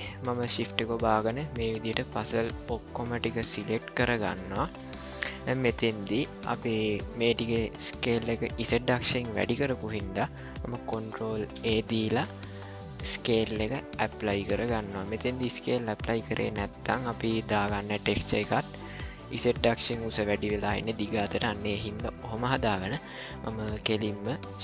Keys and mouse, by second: 0.5 click, 1.3 shift+click, 1.8 shift+click, 2.7-3.7 shift+drag, 4.2 shift+click, 5.1 middle click, 6.2-7.0 shift+middle drag, 11.5 ctrl+a.